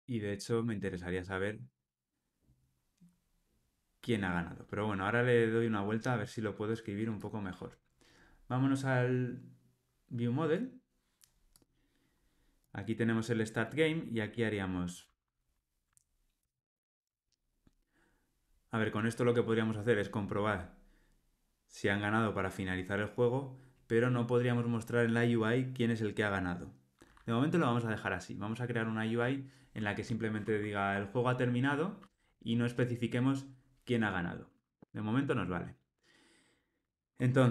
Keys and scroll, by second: 5.1 alt+super+[.